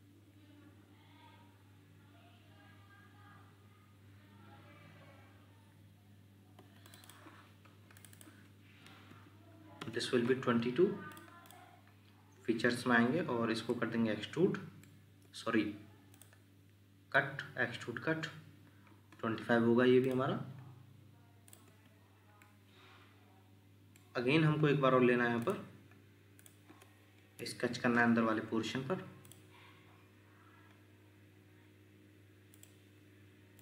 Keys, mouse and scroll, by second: 6.6 Escape, 7.0 double click, 9.8 Return, 11.5 double click, 15.2 Escape, 21.7 Escape, 22.4 middle click, 24.2 scroll down 1, 29.9-30.6 scroll down 1.